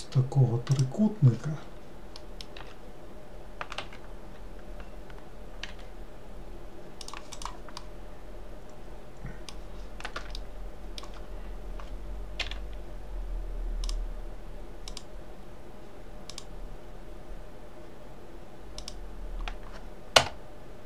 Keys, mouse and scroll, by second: 0.8 click, 2.3 middle click, 2.7 s, 7.5 click, 7.9-12.5 middle drag, 12.5 k.